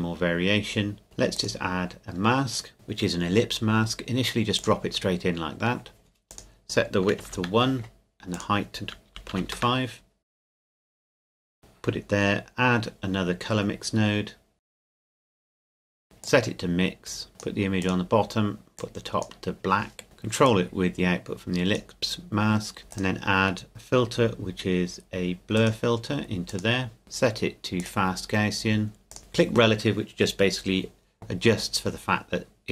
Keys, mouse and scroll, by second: 1.4 click, 4.6 click, 7.2 KP_1, 7.4 KP_Enter, 8.3 click, 9.1 KP_Decimal, 9.4 KP_5, 9.6 KP_Enter, 10.4 click, 11.0 middle click, 11.2 click, 14.8 click, 15.1 shift+d, 15.4 click, 22.9 click, 25.6 click.